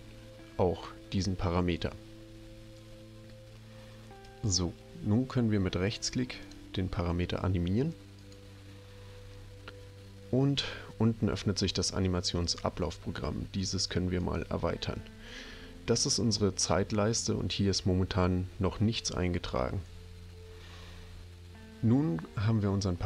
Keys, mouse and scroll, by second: 4.2 right click, 6.4 click, 14.2 click.